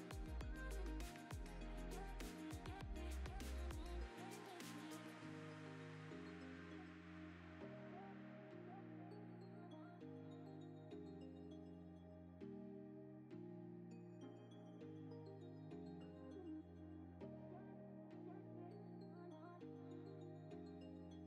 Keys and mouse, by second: 1.5 g, 1.5 y, 1.6 y, 3.0 middle click, 3.5 Tab, 3.5 click, 4.0 ctrl+KP_Add, 4.2-5.9 typing, 4.9 shift+click, 5.1 Tab, 7.1 click, 7.2 Tab, 7.3 3, 7.4 alt+click, 7.7 s, 8.6 click, 8.9 Tab, 9.3 click, 9.5-10.0 drag, 10.2 space, 10.7 click, 11.6 shift+click, 12.4 right click, 12.9 click, 13.5 click, 13.9 click, 14.3-17.2 typing, 14.8 Tab, 16.0 Escape, 16.2 Tab, 16.9 click, 17.0 Tab, 17.7 Tab, 18.7 click, 18.8 click, 19.4 shift+click, 19.7 ctrl+p, 20.7 shift+], 20.8 shift+], 21.0 shift+].